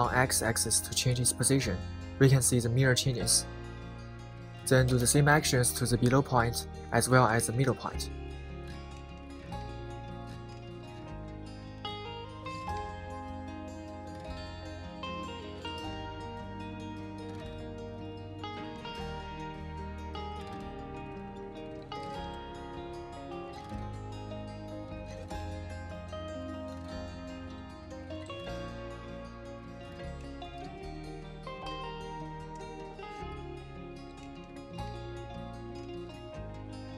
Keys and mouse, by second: 0.9 g, 1.3 x, 3.7 click, 4.9 click, 6.8 g, 7.2 x, 10.3 click, 11.1 click, 11.9 g, 12.1 x, 13.7 click, 14.5 click, 15.1 g, 15.3 x, 18.5 click, 19.0 click, 19.8 g, 20.0 x, 21.5 click, 22.3 click, 23.2 g, 23.5 x, 24.9 click, 25.8 click, 26.5 g, 26.7 x, 27.5 click, 31.5-33.8 middle drag, 34.1 KP_7.